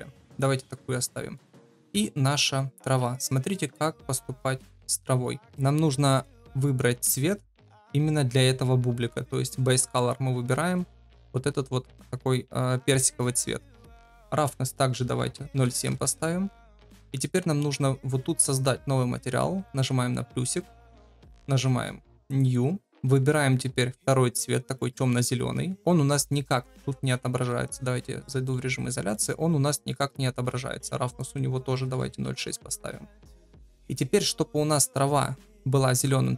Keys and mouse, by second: 1.1 shift+middle drag, 1.5-1.8 middle drag, 2.0 shift+middle drag, 3.2 middle click, 6.1 click, 10.6 ctrl+v, 14.3-16.6 drag, 19.6 click, 22.2 click, 27.4 KP_Divide, 28.2-29.1 middle drag, 31.2-33.0 drag.